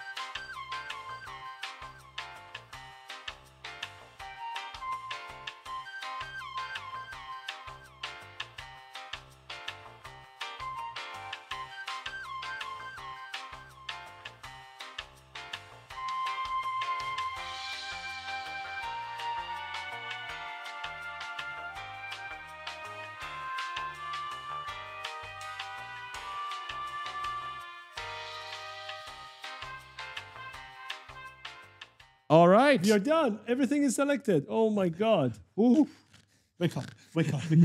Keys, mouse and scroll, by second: 0.4 shift+click, 0.9 shift+click, 0.9-3.2 typing, 1.1 right click, 1.3 ctrl+click, 1.4 right click, 1.8 right click, 2.4 shift+click, 2.5 right click, 3.1 shift+click, 3.6 right click, 3.8 shift+click, 4.0 shift+click, 4.2-6.7 typing, 4.7 shift+click, 5.3 shift+click, 6.6 shift+click, 7.0 shift+click, 7.2 shift+click, 7.7 shift+click, 7.9 shift+click, 8.3 shift+click, 8.5 right click, 8.6 w, 8.8 shift+click, 9.1 right click, 9.4 shift+click, 9.6 shift+click, 10.1 a, 10.4 shift+click, 11.3 shift+click, 11.5 shift+click, 11.9 shift+click, 12.3 right click, 12.6 shift+click, 12.7-15.5 typing, 12.8 shift+click, 15.3 shift+click, 16.0 shift+click, 16.4 right click, 16.8 shift+click, 16.9-17.8 typing, 17.4 shift+click, 17.6 shift+click, 17.7 right click, 18.1 shift+click, 18.4 shift+click, 19.2 right click, 19.3 s, 19.6 shift+click, 20.0 right click, 20.6 right click, 20.9 right click, 21.7 shift+click, 22.0 right click, 22.3 shift+click, 22.5-23.3 typing, 22.6 shift+click, 22.7 right click, 23.5 right click, 23.9 shift+click, 24.4 right click, 25.8-27.1 typing, 27.4 shift+click, 27.9 shift+click, 28.1 shift+click, 28.2 right click, 28.6 shift+click, 28.8 shift+click, 29.2 shift+click, 29.4 shift+click, 29.6 right click, 29.9 shift+click, 30.1-31.0 typing, 30.3 right click, 30.8 shift+click, 32.3 s, 33.8 d.